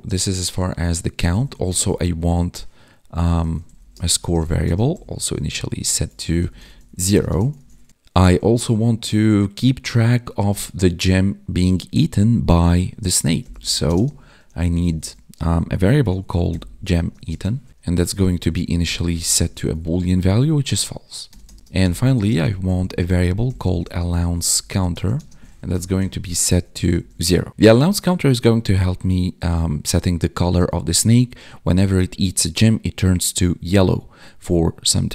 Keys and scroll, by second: 1.6 space, 3.9 space, 4.2 space, 5.9 ctrl+s, 6.6 ctrl+s, 7.5 ctrl+s, 13.8 space, 17.0 space, 17.2 space, 17.8 space, 18.0 space, 19.6 ctrl+s, 22.2 space, 24.9 space, 25.1 space, 26.9 ctrl+s.